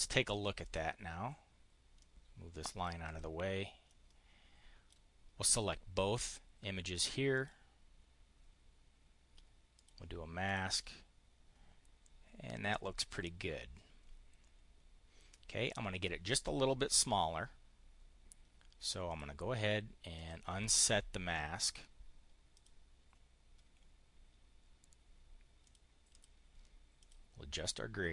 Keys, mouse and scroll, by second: 0.2 click, 1.8 click, 2.9 click, 3.7-4.8 drag, 7.2 click, 9.6 click, 10.3 click, 18.9 click, 20.0 click, 22.4 click, 25.5 click, 26.0 click, 26.8 click.